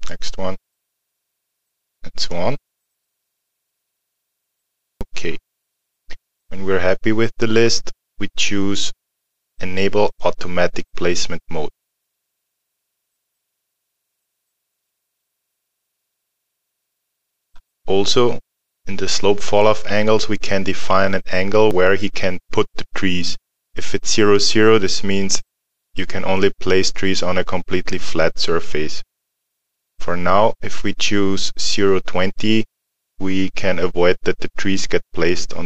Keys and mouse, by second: 10.1 click, 13.4 alt+middle click.